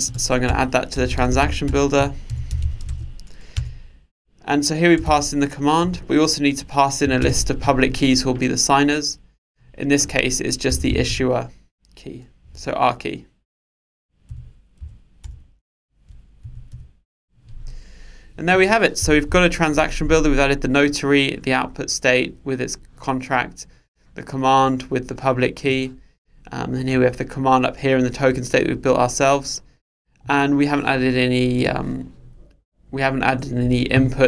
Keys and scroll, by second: 1.7 Return, 12.5 Return.